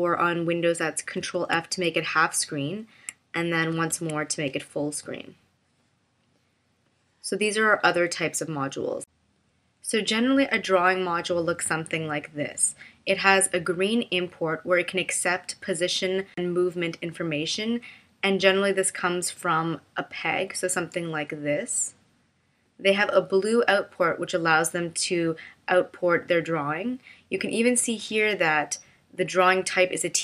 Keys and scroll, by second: 1.1 super+f, 3.7 super+f.